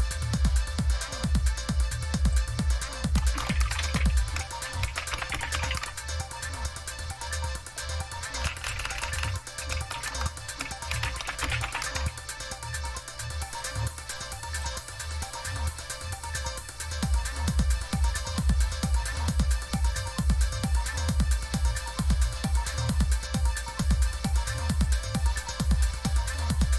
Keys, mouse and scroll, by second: 0.0 click, 2.2 click, 3.1 Caps_Lock, 3.3-6.2 typing, 8.4 BackSpace, 8.5 BackSpace, 8.7 BackSpace, 8.9 BackSpace, 10.0 Caps_Lock, 10.6-12.2 typing, 14.5 click, 18.7 click, 22.5 click, 24.7 click.